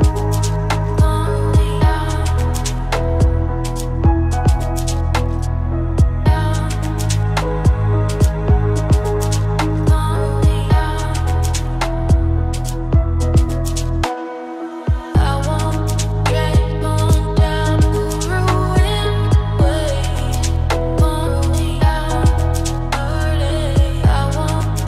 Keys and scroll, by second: 12.9 ctrl+z.